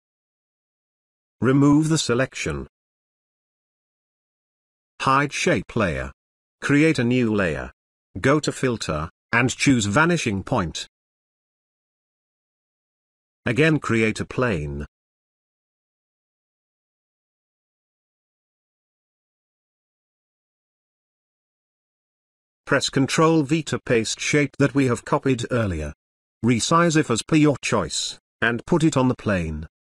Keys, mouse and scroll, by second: 1.6 click, 10.0 click, 13.5 click, 19.7 click, 22.8 ctrl+v, 25.5-27.3 drag.